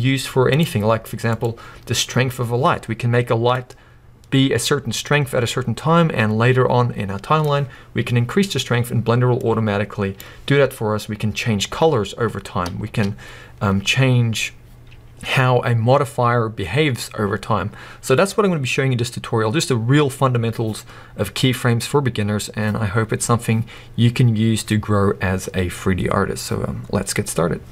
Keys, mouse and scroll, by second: 1.3 click, 3.5-27.7 drag, 12.8 space, 12.9 space.